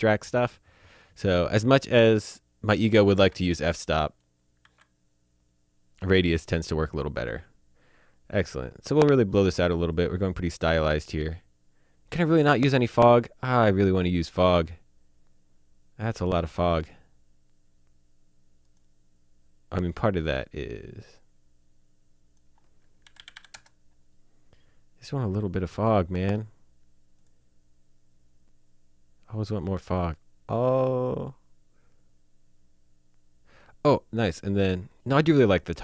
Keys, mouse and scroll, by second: 2.7 click, 3.1 KP_0, 4.6 z, 9.8 click, 14.4 click, 16.0 click, 16.9 click, 18.7 click, 21.2 click, 23.1 KP_9, 23.3 KP_8, 23.5 KP_Enter, 27.2 click.